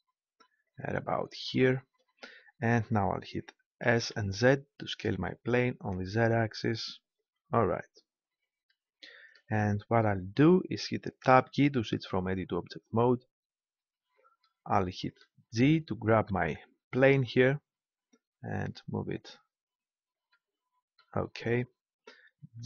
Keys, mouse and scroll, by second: 0.8-2.5 drag, 2.5-3.8 middle drag, 3.8 s, 7.2 click, 11.2 Tab, 16.1 g, 19.6-21.1 drag.